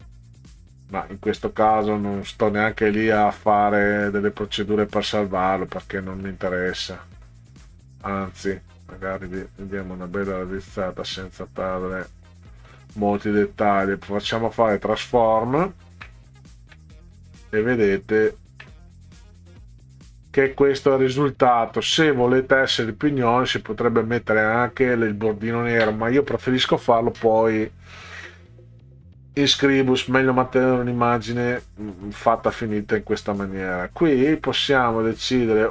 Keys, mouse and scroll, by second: 0.5 middle click, 1.5 middle click, 2.2 middle click, 2.9 middle click, 3.7 middle click, 4.6 middle click, 5.5 middle click, 6.3 middle click, 6.9 middle click, 7.8 middle click, 8.9-12.1 drag, 12.5 middle click, 14.3 click, 15.7 ctrl+scroll down 2, 16.5 ctrl+scroll down 2, 17.1 middle click, 18.4 ctrl+scroll down 2, 19.1 middle click, 20.5 middle click, 31.5 middle click, 33.9 ctrl+scroll up 2, 35.4 ctrl+scroll up 2.